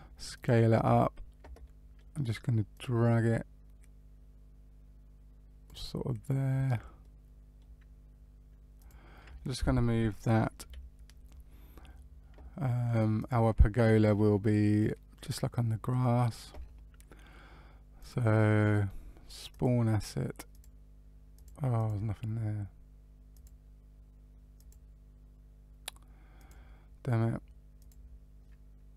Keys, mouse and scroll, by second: 1.6 middle click, 2.7 click, 6.9 middle click, 8.0-8.7 scroll down 1, 8.7 click, 10.5 Delete, 13.1 click, 17.9 click, 19.5 click, 23.3 click, 24.5 click, 27.7 click.